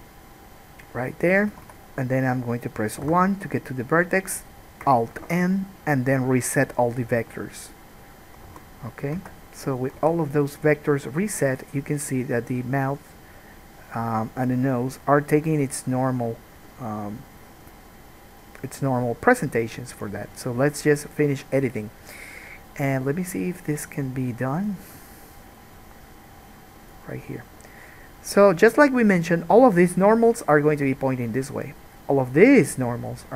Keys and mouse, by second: 1.9 Escape, 3.3 1, 5.4 alt+n, 8.7 alt+a, 9.4 Tab, 10.2 alt+a, 12.7-25.0 middle drag, 25.0-29.4 drag, 29.4-33.3 middle drag.